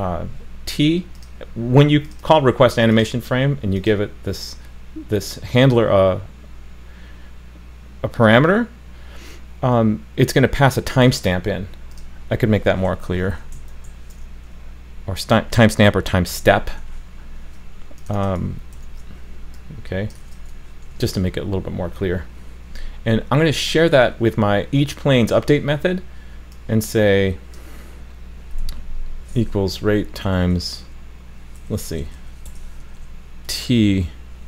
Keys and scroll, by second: 18.7 super+c, 20.2 super+v, 20.9 super+s.